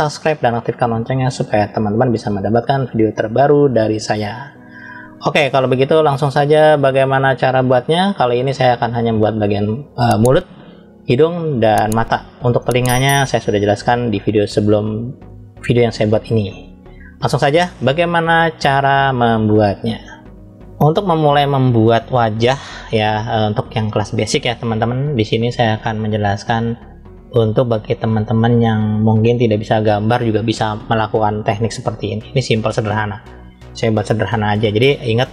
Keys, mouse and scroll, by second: 0.0 scroll up 1, 0.4-1.4 middle drag, 1.7-9.0 middle drag, 11.9-12.5 scroll down 2, 12.5 middle click, 14.0-15.1 middle drag, 16.9 scroll up 1, 17.6-20.6 middle drag.